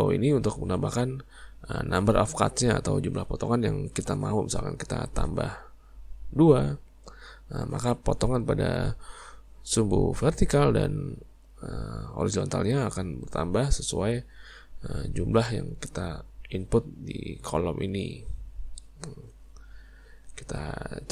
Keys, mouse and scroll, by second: 4.9-7.9 drag.